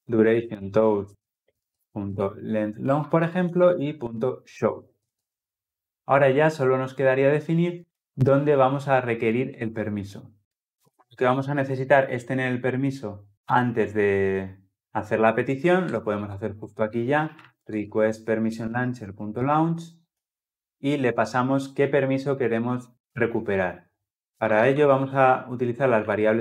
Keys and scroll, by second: 2.9 Return, 4.9 ctrl+alt+l, 6.0 ctrl+alt+o, 18.3 Return.